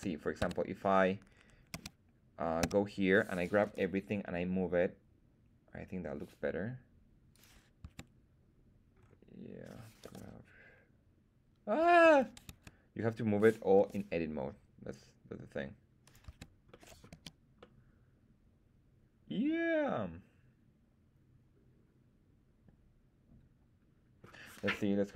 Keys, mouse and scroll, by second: 0.4 Tab, 1.7 a, 2.6 a, 3.6 g, 7.3 click, 7.8 Tab, 8.9-10.0 scroll down 1, 10.0-10.4 scroll down 1, 10.0 g, 12.0 Escape, 12.4 Tab, 13.7 g, 16.0 click, 16.2 Tab, 16.6-17.0 middle drag, 17.1 z, 17.5-24.2 middle drag.